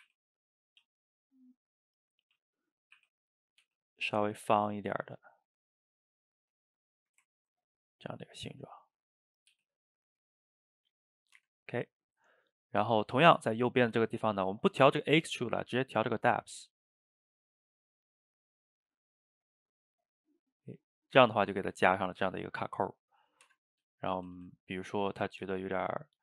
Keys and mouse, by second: 0.0 r, 0.8 s, 2.0 click, 2.4 s, 3.0 r, 3.7 g, 4.8 click, 4.9 g, 6.2 click, 6.4 g, 7.0-8.4 shift+middle drag, 8.4 click, 8.5 g, 9.4 click, 9.5 g, 11.0 middle click, 11.4 Tab, 14.2-16.5 middle drag, 16.5-21.2 shift+drag, 21.2-23.5 middle drag, 23.5 Tab, 24.0 shift+middle drag, 24.2 a, 24.4 a, 24.6 click, 24.8-25.4 middle drag, 25.4 s.